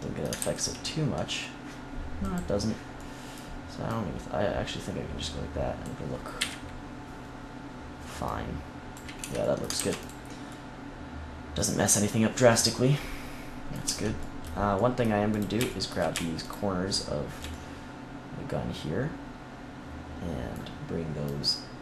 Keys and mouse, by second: 0.3 ctrl+z, 2.9-5.7 drag, 6.3 KP_1, 8.2-9.6 drag, 9.1 Tab, 9.7 ctrl+s, 13.8 Tab, 15.2-17.3 drag, 21.2-21.8 drag.